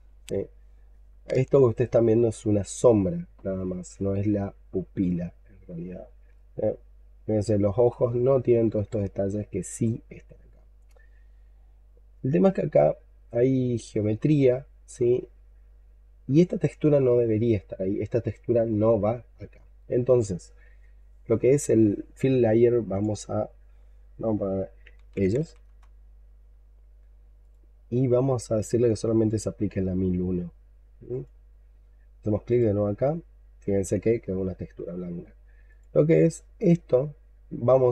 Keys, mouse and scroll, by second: 0.9-1.8 scroll up 1, 1.8 scroll up 3, 3.2-4.0 scroll up 5, 4.0-4.9 scroll down 4, 5.1 alt+middle click, 6.0 alt+middle click, 6.2 shift+right click, 8.2-8.8 scroll up 7, 8.9 alt+middle click, 9.7-10.2 scroll down 2, 10.2-11.2 scroll up 5, 12.4-13.5 scroll down 12, 13.7 alt+middle click, 14.4-15.2 scroll up 8, 15.2 alt+middle click, 15.7-18.1 scroll up 2, 18.1-18.6 scroll down 3, 18.8 alt+middle click, 19.4-22.4 scroll down 3, 23.0 double click, 24.6-25.5 typing, 33.5-34.0 scroll down 6, 34.3 alt+middle click.